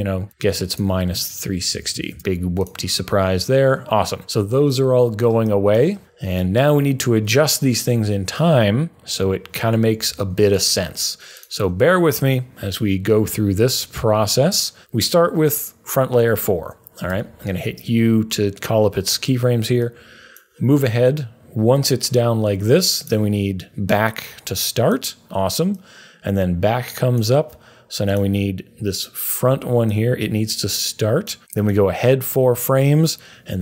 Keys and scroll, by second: 1.4-2.7 typing, 10.0 super+a, 17.1 u.